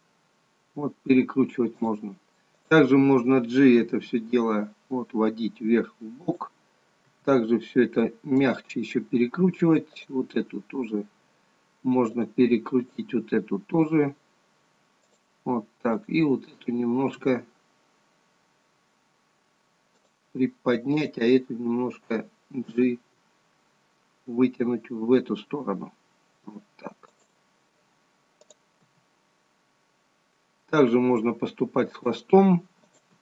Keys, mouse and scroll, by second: 2.5 click, 3.9 g, 7.2 r, 10.1 click, 10.4 r, 13.2 click, 13.4 r, 16.1 click, 17.2 r, 21.1 click, 22.8 g, 28.6 click, 29.0 g, 32.9 click.